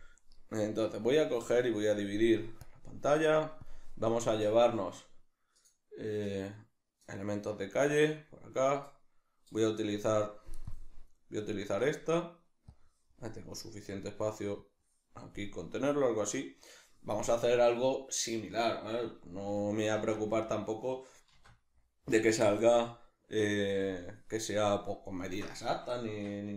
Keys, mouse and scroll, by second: 0.0-1.1 middle drag, 1.1-8.8 drag, 8.2-8.8 scroll up 1, 8.8-11.8 middle drag, 12.7-15.5 drag, 15.5-26.5 middle drag, 19.9 shift+c, 21.3 shift+a, 26.1 Tab.